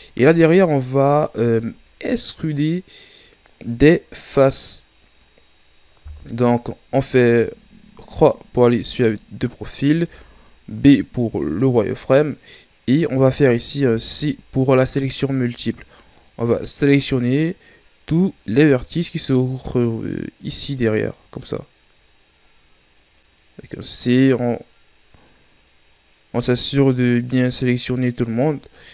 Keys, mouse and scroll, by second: 0.3-1.4 scroll up 5, 1.4-2.3 shift+scroll up 1, 6.1 KP_3, 7.1-7.6 ctrl+scroll up 11, 8.0-9.0 ctrl+scroll up 4, 9.0-9.6 ctrl+scroll up 1, 9.6-9.9 scroll up 1, 9.9 z, 13.4 right click, 13.9 c.